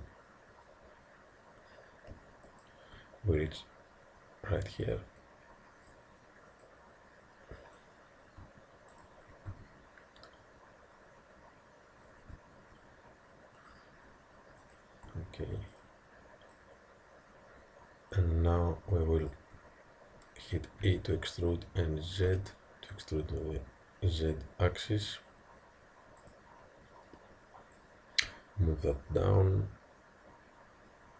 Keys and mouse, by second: 5.9-8.4 drag, 9.0 click, 9.6 e, 15.8-18.3 drag, 20.9 e, 26.3-29.6 drag.